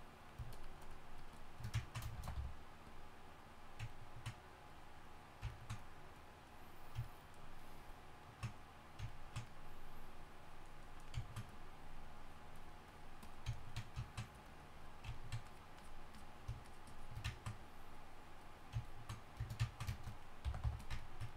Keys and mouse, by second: 1.8 click, 2.1 shift+c, 2.3 f, 7.0 click, 7.8 drag, 20.4 g, 20.6 f.